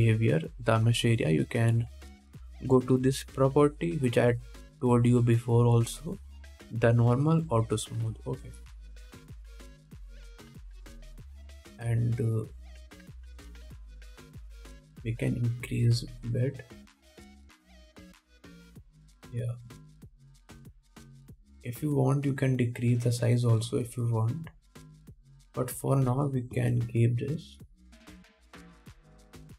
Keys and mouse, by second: 1.2 middle click, 1.2 right click, 8.7 middle click, 8.7 right click, 9.7 middle click, 9.7 right click, 10.4 KP_1, 13.7-29.5 drag, 16.2 s, 20.9 KP_1, 27.9 KP_1, 28.7-29.5 middle drag, 28.7-29.5 right drag.